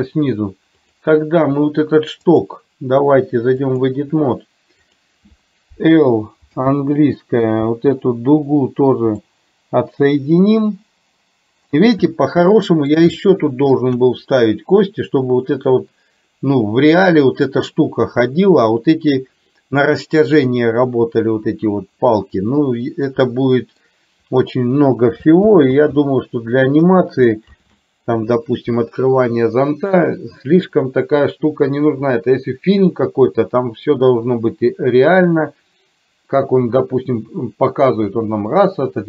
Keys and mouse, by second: 2.5-4.1 drag, 5.0 click, 9.4 middle click, 10.1-11.9 middle drag, 12.6 middle click, 13.4 shift+middle click, 23.4 middle click, 25.6 ctrl+z, 27.6 ctrl+z.